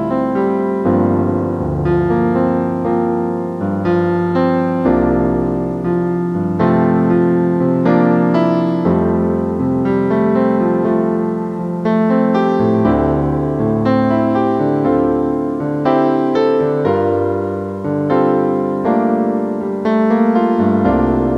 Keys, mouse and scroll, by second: 0.0-2.2 typing, 8.6 F9, 12.5 F9, 16.8 double click, 20.4 right click, 21.2 middle click.